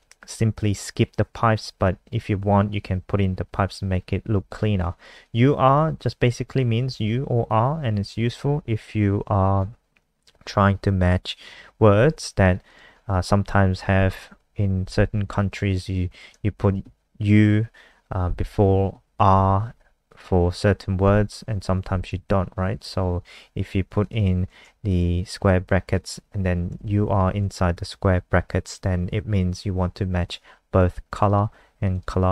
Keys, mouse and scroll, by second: 13.7 Right, 16.5 shift+Left, 18.8 Right, 24.8 click, 24.8 shift+click, 27.1 shift+Left, 31.1 click, 31.2 click, 31.8 click, 32.0 click.